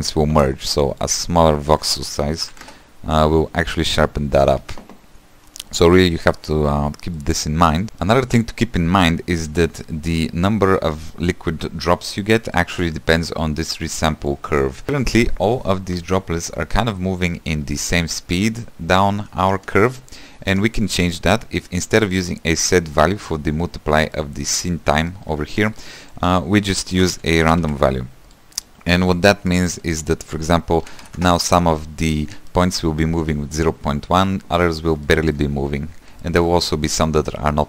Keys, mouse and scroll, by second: 2.7-4.7 drag, 4.7 ctrl+z, 6.0-6.6 scroll down 4, 6.6 shift+middle click, 6.9-7.2 scroll down 1, 7.2 middle click, 7.8 click, 18.0-19.7 shift+middle drag, 19.7 space, 20.6 space, 25.8 x, 28.4 shift+a, 29.9-33.7 drag, 33.7 space, 34.7-35.2 scroll up 3, 35.2 shift+middle click, 36.0-36.3 scroll down 5, 36.3 shift+middle click, 36.8-37.6 scroll up 2.